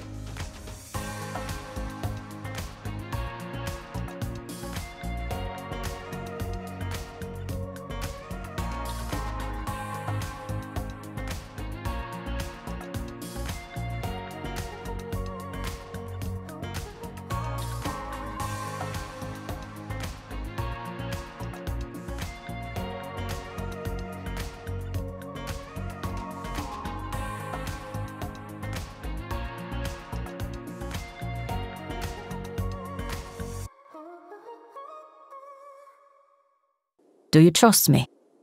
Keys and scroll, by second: 36.8 Return, 37.5 r.